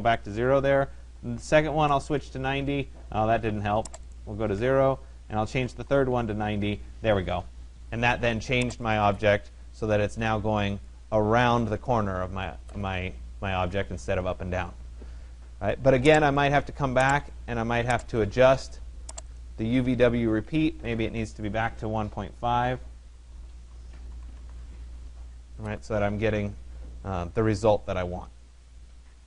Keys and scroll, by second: 0.2 Tab, 1.6 0, 2.0 Tab, 4.4-6.1 typing, 4.6 Tab, 19.8 1, 20.4 Delete, 20.6 5, 22.9 BackSpace, 24.2 Tab.